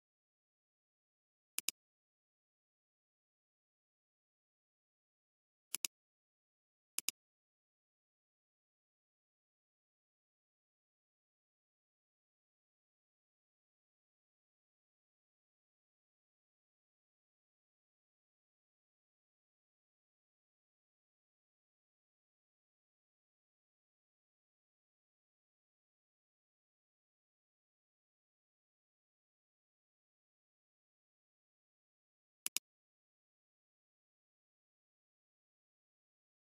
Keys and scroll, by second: 1.3 space, 5.5 space.